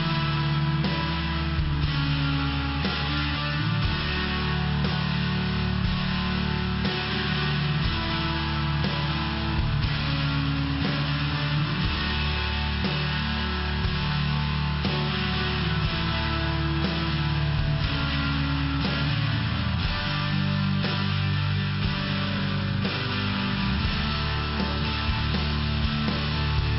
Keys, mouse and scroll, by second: 0.1 click, 0.2 click, 0.6 click, 0.7 click, 1.2 click, 1.3 click, 1.8 click, 1.9 click, 2.2 click, 2.3 double click, 3.2 double click, 3.4 double click, 3.9 click, 4.6 click, 4.8 click, 5.9 click, 6.1 click, 7.5 click, 7.6 click, 9.0 click, 10.0 click, 10.1 click, 10.2 click, 10.3 click, 10.9 click, 13.5 click, 14.6 click, 15.1 click, 15.6 click, 16.5 click, 17.4 click, 18.7 click, 19.6 click, 20.5 click, 22.0 click, 25.4 click.